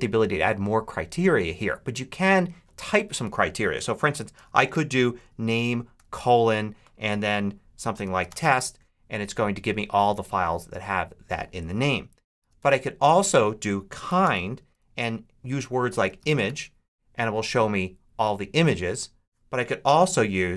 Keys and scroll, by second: 3.6-5.8 typing, 7.6-8.6 typing, 12.2 super+a, 12.4 super+BackSpace, 13.3-16.8 typing, 20.0 BackSpace.